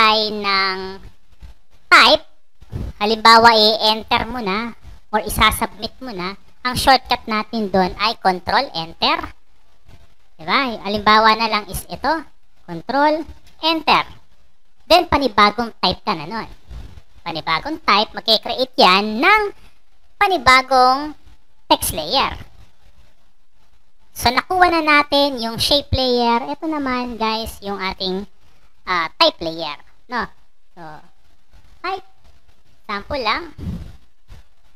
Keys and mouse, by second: 2.5 click, 12.2 click, 13.2 ctrl+Return, 16.3 click, 17.3 click, 31.9-33.5 typing, 34.6 click.